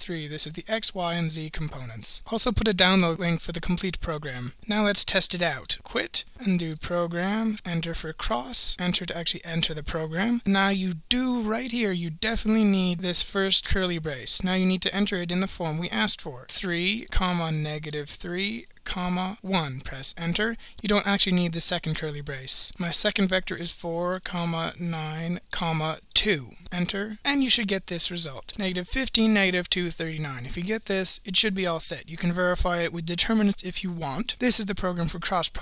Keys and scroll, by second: 23.9-26.1 typing, 26.7 Return.